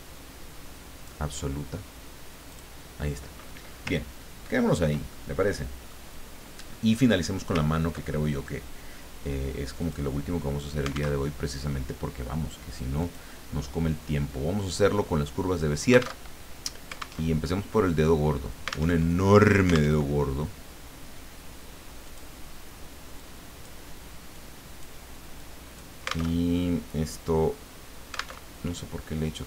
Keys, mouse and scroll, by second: 2.5 click, 4.0 ctrl+scroll down 2, 4.6-5.0 ctrl+scroll down 2, 5.1-6.2 ctrl+drag, 6.7 scroll up 2, 7.2 scroll down 2, 7.7-8.1 ctrl+scroll up 1, 8.1 ctrl+middle click, 9.8 click, 11.2 alt+Tab, 13.0 click, 14.0 middle click, 16.2 alt+Tab, 17.3 alt+Tab, 18.9 alt+Tab, 19.9 alt+Tab, 22.0 click, 23.2-24.3 drag, 24.4 click, 25.3 click, 26.4 alt+Tab, 28.4 alt+Tab.